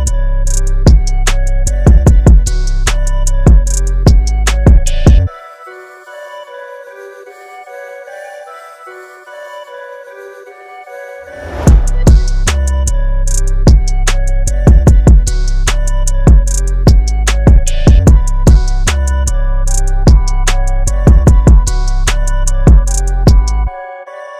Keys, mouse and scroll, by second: 0.7 click, 2.9 click, 3.7-5.2 scroll up 1, 8.9 scroll down 1, 10.9 click, 13.8 click, 14.3 KP_4, 14.8 click, 16.9-17.5 scroll up 1, 21.7-23.2 scroll up 1.